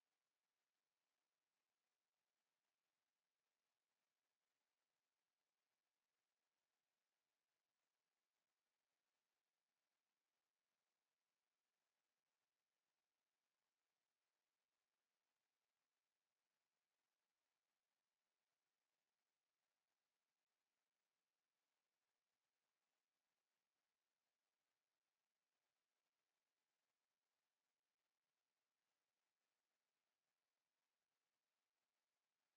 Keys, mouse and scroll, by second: 13.3-15.2 alt+scroll up 1, 16.4 ctrl+z, 18.0 ctrl+z, 23.0 alt+scroll up 1, 23.1 alt+scroll down 1, 25.0 ctrl+z.